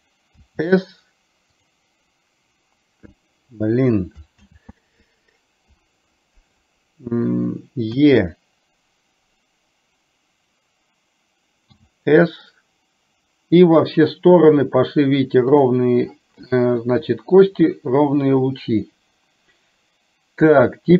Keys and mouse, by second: 4.6 ctrl+z.